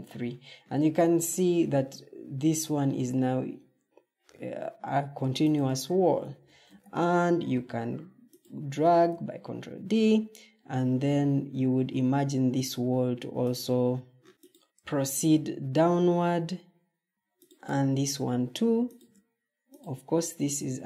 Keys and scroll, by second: 6.3 ctrl+d, 14.3 ctrl+d, 16.8 ctrl+d.